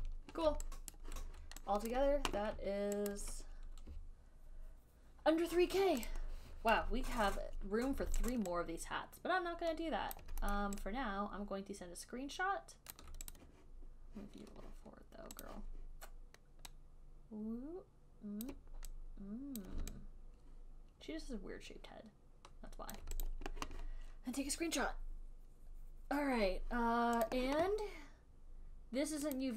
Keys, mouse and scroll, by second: 0.3 click, 1.2 alt+right click, 2.2 click, 3.4 ctrl+click, 6.4 click, 8.6 alt+right click, 10.4 alt+click, 10.9 alt+middle click, 13.2 alt+click, 13.7 click, 15.8 click, 19.9 click, 23.2 alt+click, 23.6 click, 27.6 click, 29.3 click.